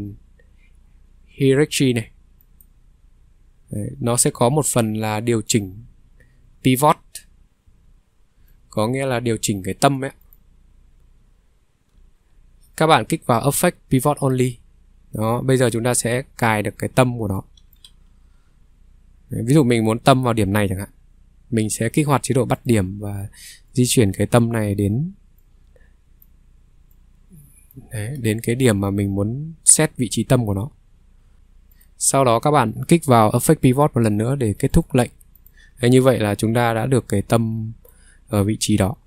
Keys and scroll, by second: 4.3 ctrl+3, 7.6 ctrl+3, 11.8 Escape, 11.9 ctrl+3.